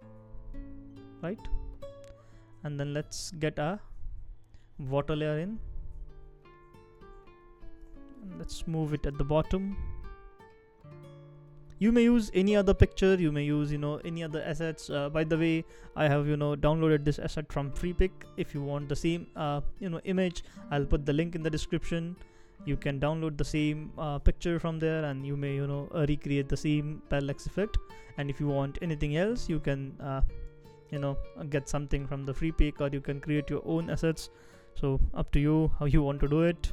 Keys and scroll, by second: 0.0 shift+Up, 0.0 shift+Down, 0.2 shift+Down, 0.6 shift+Up, 1.1 shift+Up, 1.5 shift+Down, 5.2 super+x, 7.0 super+v, 8.6 shift+Down, 9.0 shift+Down, 9.1 shift+Down, 14.8 Down, 25.5 super+x, 27.2 super+v, 33.7 shift+Down, 34.2 shift+Down, 34.3 shift+Down.